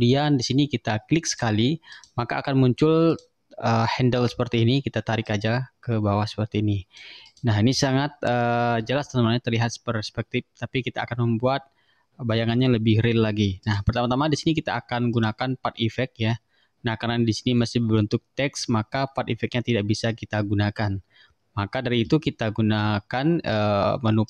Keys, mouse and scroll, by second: 1.4 click, 2.0 click, 3.2 click, 5.3-7.2 drag, 7.3 click, 8.0-8.4 ctrl+scroll up 2, 12.5 ctrl+scroll down 2, 13.7 click, 15.2 click.